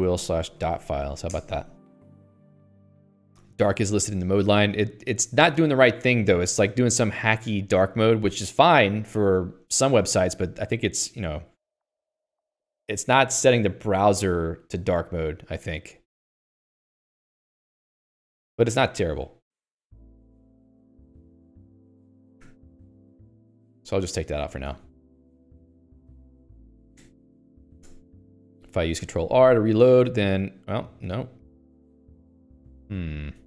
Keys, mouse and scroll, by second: 18.2 Escape, 19.1 Escape, 19.2 Escape, 19.8 k, 20.1 k, 21.8-24.8 typing, 25.1 ctrl+s, 25.3 Escape, 25.4 Escape, 33.1 Escape.